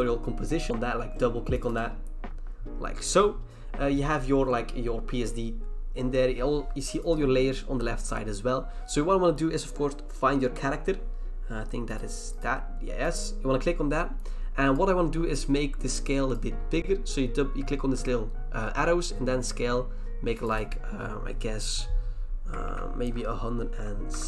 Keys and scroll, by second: 22.6 Right, 23.0 BackSpace.